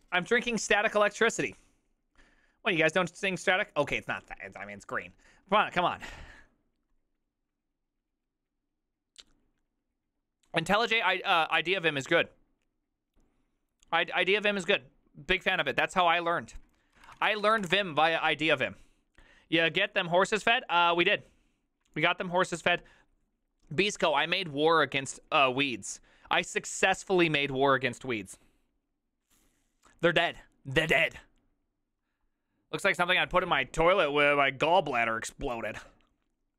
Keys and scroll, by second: 17.4-18.2 typing.